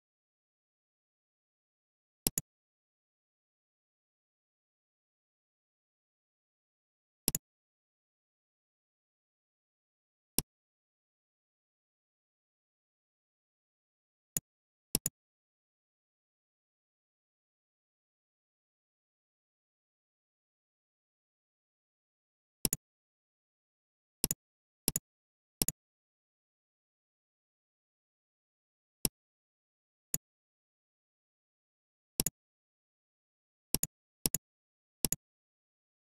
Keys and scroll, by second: 16.3 super+Right, 17.5 super+Right, 18.7 super+Left.